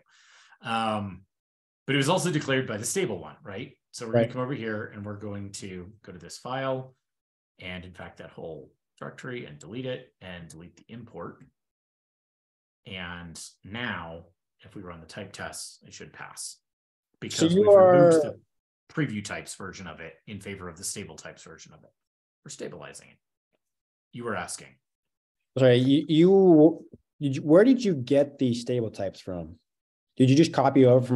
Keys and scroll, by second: 6.2 shift+super+\, 7.8 super+BackSpace, 10.6 ctrl+shift+k, 10.8 ctrl+shift+k, 11.2 super+s, 13.0 ctrl+super+Return, 13.2 ctrl+p, 14.3 ctrl+l.